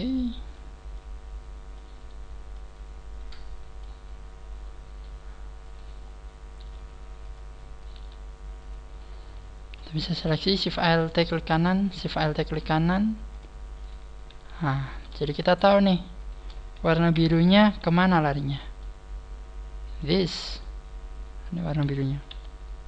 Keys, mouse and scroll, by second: 0.1 click, 1.3 click, 2.0 right click, 2.5 click, 5.6 right click, 6.0-6.5 scroll down 2, 6.5 scroll down 1, 6.5 g, 7.3 click, 7.8 right click, 8.0 g, 9.9 alt+shift+right click, 13.9 click, 14.3 a, 15.0 right click, 15.3 shift+right click, 15.7 shift+right click, 17.1 f, 17.6 a, 18.3 scroll down 4, 18.7 middle click, 19.6 shift+right click, 20.0 middle click, 20.2 scroll down 2, 20.5 middle click, 22.0 middle click, 22.3 middle click, 22.3 KP_3, 22.7-22.8 scroll up 9.